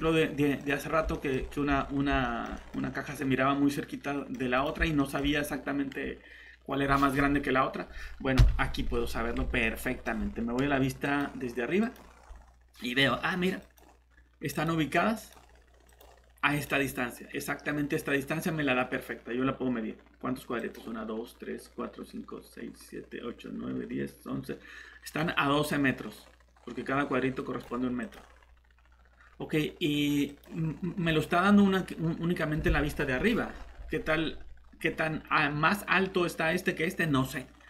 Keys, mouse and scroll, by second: 0.6 scroll up 1, 1.1 middle click, 1.3 scroll up 1, 2.2 middle click, 2.8 scroll down 1, 3.1 middle click, 4.6 click, 5.0 middle click, 8.4 shift+7, 8.9 scroll down 1, 9.6 middle click, 9.9 typing, 11.0 click, 31.0 scroll down 1, 31.5 scroll up 1.